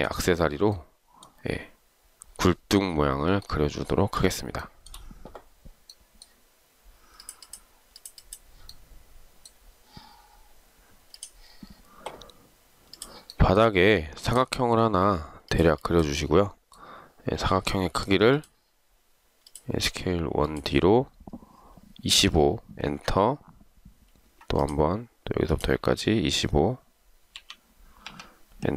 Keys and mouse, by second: 4.8 shift+right click, 22.3-22.9 typing, 22.9 Return, 24.7 Return, 27.5 2, 28.1 5.